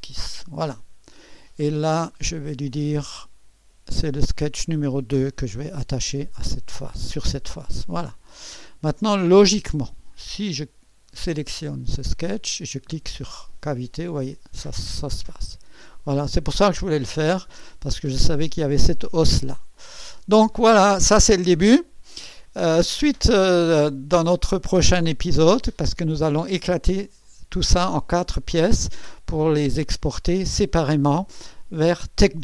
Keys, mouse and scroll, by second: 3.4 click, 4.3-8.0 drag, 8.7 click, 10.2 click, 12.7 click, 15.1 click, 16.0 click, 16.8-17.2 scroll up 1, 17.2-18.7 scroll down 1, 18.7-26.5 drag, 29.5-30.4 scroll down 2.